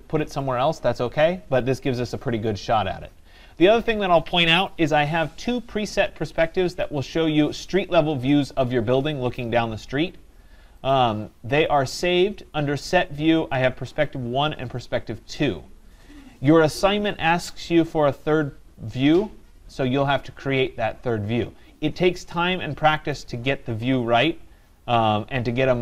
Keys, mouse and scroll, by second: 10.9-16.0 drag, 23.3-25.8 drag.